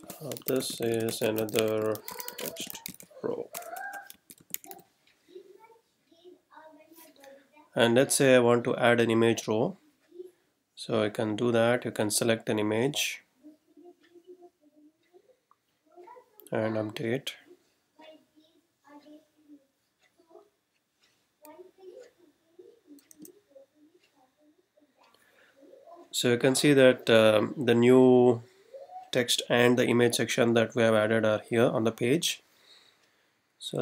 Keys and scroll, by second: 0.0-5.2 typing, 23.2 r.